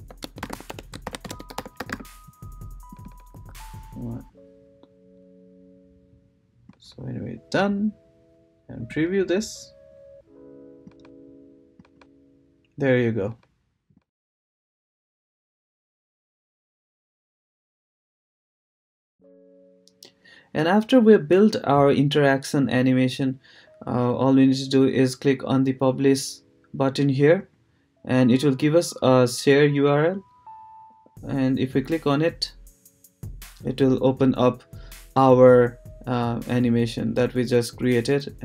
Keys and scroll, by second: 0.0-3.3 typing.